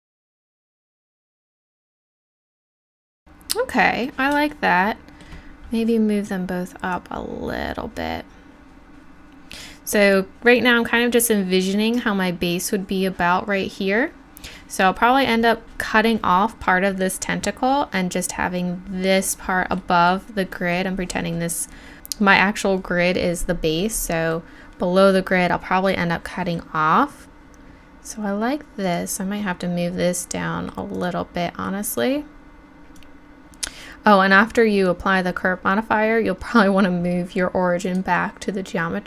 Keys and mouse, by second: 0.5 Tab, 0.5 drag, 1.0 g, 1.2 click, 1.9 KP_7, 2.2 g, 2.6 click, 30.6-30.9 drag, 30.9-32.6 middle drag, 32.6 click, 33.0 click.